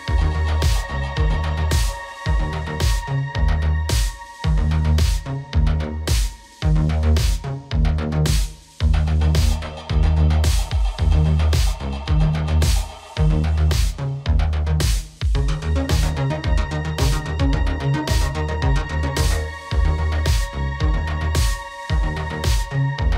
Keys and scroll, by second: 0.0 ctrl+a, 18.6 ctrl+t.